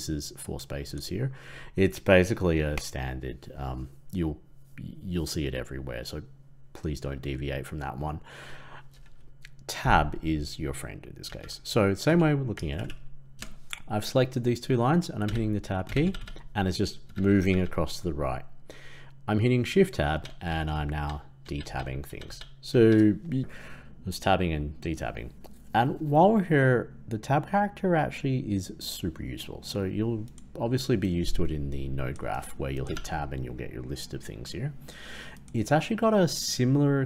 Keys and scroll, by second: 23.4 ctrl+z.